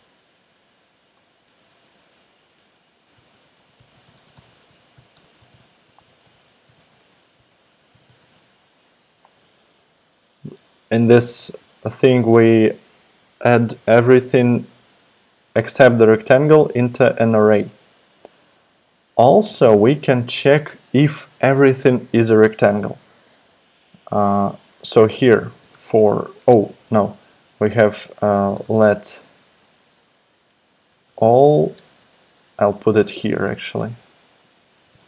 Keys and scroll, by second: 1.4 alt+BackSpace, 1.6 alt+BackSpace, 1.9 alt+BackSpace, 2.9-9.1 typing, 19.8 Return, 25.1-26.1 typing, 26.5 alt+BackSpace, 28.1-29.0 typing, 30.1-31.7 typing, 31.7 super+BackSpace, 32.5 Up, 32.9 Up, 33.8 Right, 33.8 Return, 33.9 Return, 34.6-35.0 typing.